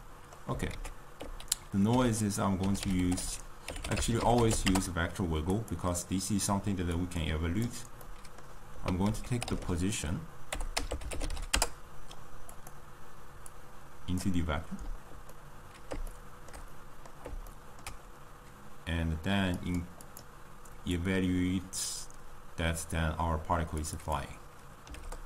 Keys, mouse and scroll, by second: 7.8 click, 8.0-14.4 middle drag, 14.4-15.4 drag, 15.4-21.3 middle drag, 21.3-25.2 drag.